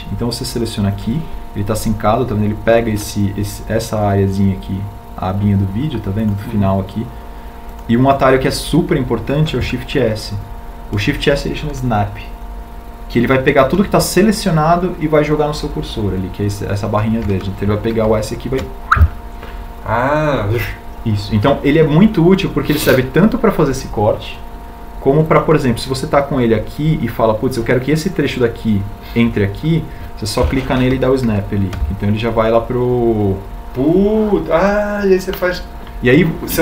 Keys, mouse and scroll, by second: 19.9 shift+s, 33.2 shift+s.